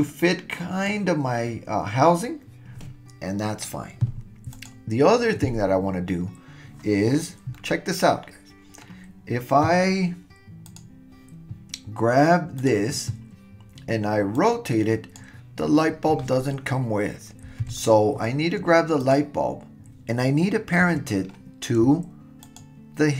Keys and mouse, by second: 7.5-8.9 middle drag, 10.7 click, 12.6 drag, 14.4 click, 17.6 super+z, 19.0 click, 22.5 shift+click.